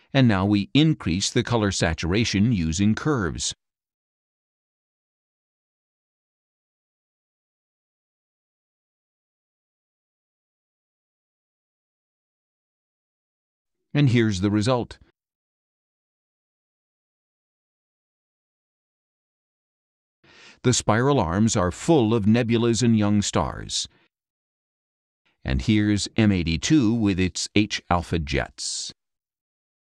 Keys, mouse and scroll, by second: 0.8 scroll up 1, 2.6 click, 4.5 click, 6.7 click, 7.8 click, 8.9 click, 10.3-11.4 drag, 13.2 click, 15.3 scroll down 1, 16.5 middle click, 17.1 click, 17.9-19.1 middle drag, 19.7 scroll up 1, 21.5 middle click, 23.0 middle click, 23.8 middle click, 24.3 click, 24.4 middle click.